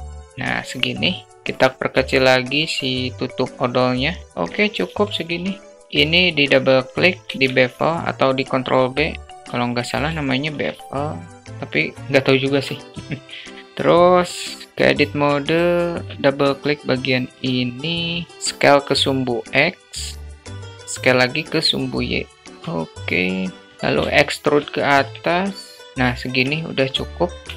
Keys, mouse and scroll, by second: 0.3 Tab, 0.3 alt+z, 1.2 alt+z, 1.2 s, 3.4 click, 3.5 alt+z, 3.9-4.2 alt+middle drag, 4.2 `, 5.1 `, 5.6 Tab, 6.0 ctrl+b, 9.1 Tab, 10.9 shift+middle drag, 11.5 alt+shift+middle click, 12.0 alt+middle click, 12.7 middle click, 13.1-13.6 alt+shift+middle drag, 13.9 Tab, 14.7 alt+shift+middle click, 16.0 click, 16.5 middle click, 17.8 alt+middle click, 18.3 ctrl+z, 18.3 click, 20.1-22.4 drag, 22.4-23.1 alt+middle drag, 23.7 e, 25.8 shift+middle click, 26.3 alt+middle click.